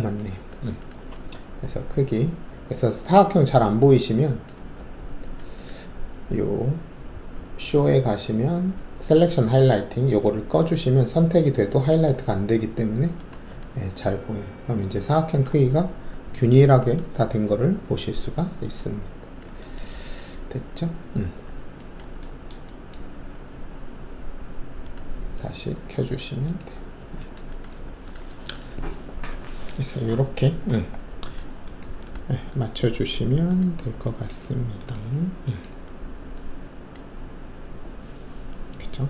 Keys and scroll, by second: 4.7 alt+`.